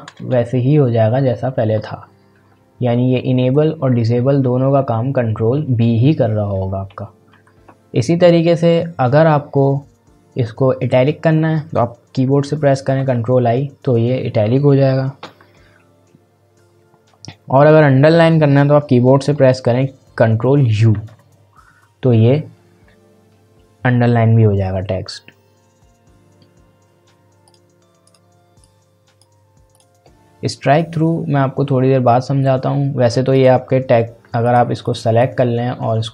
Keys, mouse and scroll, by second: 11.7 ctrl+b, 12.9 ctrl+i, 15.2 ctrl+b, 20.9 ctrl+u, 27.4 click, 33.3-36.1 drag.